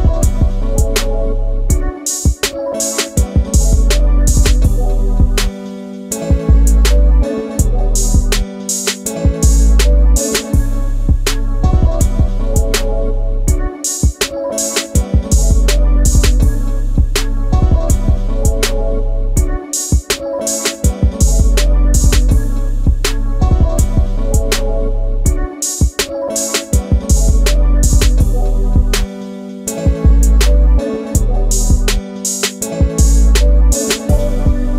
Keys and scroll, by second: 3.9 s, 17.8 alt+t, 18.6 shift+space, 19.9 a, 22.6 space, 23.2 p, 24.7 space.